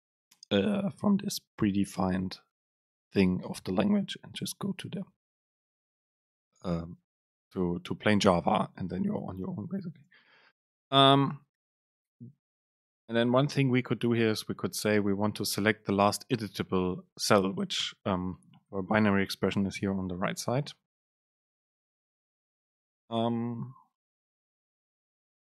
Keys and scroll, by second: 9.1 BackSpace, 10.1 super+space, 19.9 ctrl+shift+super+F9.